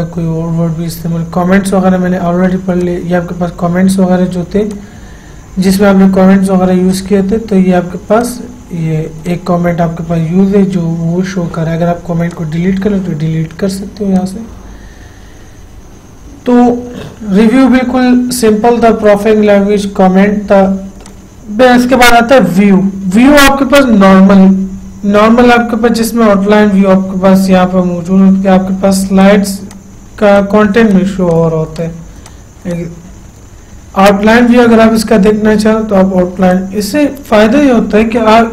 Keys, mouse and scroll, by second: 3.1 click, 7.2 click, 12.6 click, 21.4 click, 29.5 click, 36.9 click.